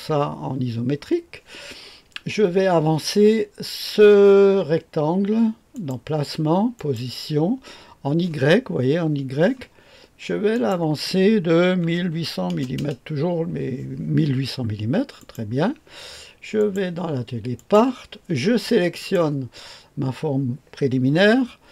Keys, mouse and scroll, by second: 5.7 click, 6.8 click, 10.5 click, 11.8 KP_1, 12.1 KP_8, 12.5 KP_0, 12.7 KP_0, 15.2 click, 15.6-16.0 typing, 16.5 click, 17.6 click, 19.0 click.